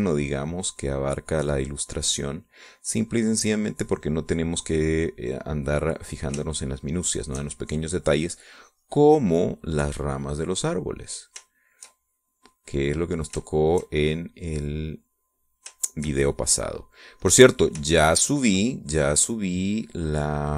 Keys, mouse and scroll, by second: 7.5 shift+click, 7.8-8.9 shift+middle drag, 9.4-13.0 drag, 13.2-15.0 shift+drag, 15.1-16.7 shift+drag, 16.8 shift+click, 17.3 shift+click, 18.3 middle click, 19.0-20.5 shift+drag.